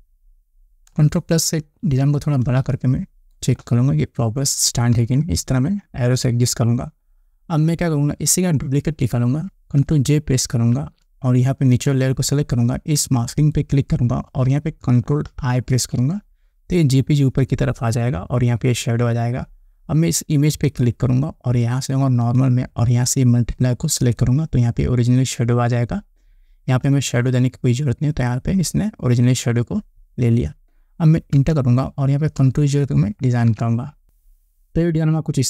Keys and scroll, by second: 2.1 ctrl+=, 3.0 space, 5.4 Down, 11.2 ctrl+j, 16.2 ctrl+i, 31.8 Return, 33.7 ctrl+0.